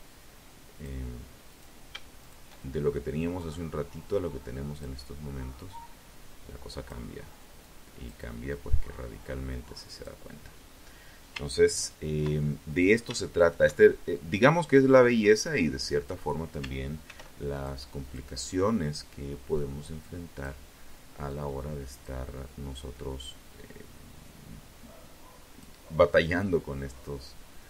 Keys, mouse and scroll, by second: 0.4 shift+right click, 1.5-3.2 drag, 3.8-5.2 drag, 5.8 click, 6.6-8.4 drag, 10.8 ctrl+right click, 11.6 shift+right click, 12.3-14.4 drag, 15.2 ctrl+r, 15.7 ctrl+click, 16.2 ctrl+click, 17.7 click, 19.4 click, 20.9-24.0 drag, 24.3-26.6 drag, 27.4 KP_3.